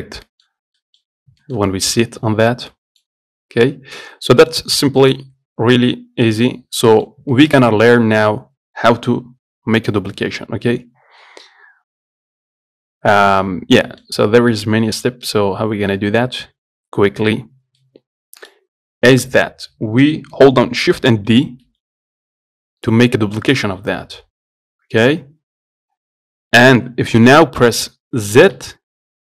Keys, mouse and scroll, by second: 0.2-0.5 scroll up 1, 0.5 middle click, 0.8 scroll down 1, 1.0-5.3 middle drag, 5.3 click, 6.5-13.9 middle drag, 14.4 scroll up 1, 14.7-21.5 shift+middle drag, 21.5 shift+d.